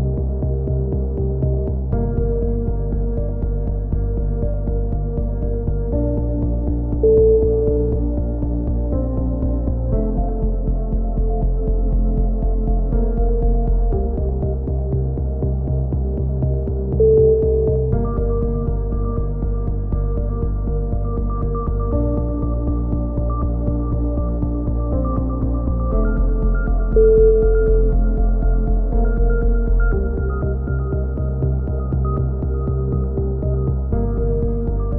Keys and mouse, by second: 1.3 middle click, 2.1-3.3 middle drag, 2.1 z, 3.3-4.7 drag, 4.2 right click, 4.6 KP_3, 5.1 z, 6.2-7.5 drag, 7.9-9.0 middle drag, 8.6 z, 9.0 click, 10.7 ctrl+KP_7, 11.3 z, 11.9 middle click, 13.0-14.5 middle drag, 13.7-14.7 drag, 14.8 click, 17.3-18.4 middle drag, 19.0 KP_3, 19.6 middle click, 20.8 middle click, 21.2 click, 22.5 right click, 23.0 click, 23.0 KP_3, 24.3 click, 28.0 a, 28.1 z, 28.5 click, 31.6 middle click, 32.5 click, 34.3-34.9 drag, 34.3 z.